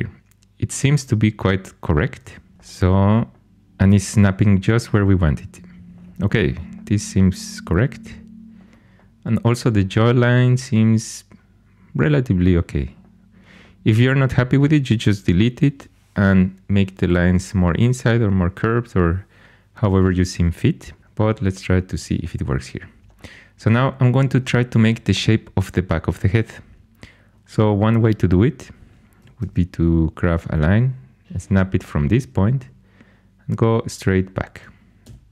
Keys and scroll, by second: 2.5 alt+h, 29.3 shift+a, 35.0 c.